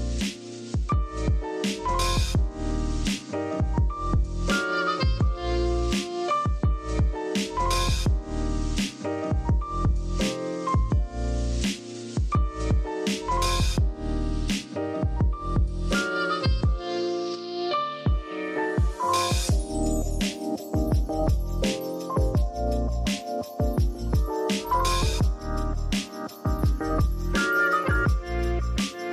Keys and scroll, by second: 2.7-3.6 typing, 5.0-5.9 typing, 8.3-9.7 typing, 28.5 v.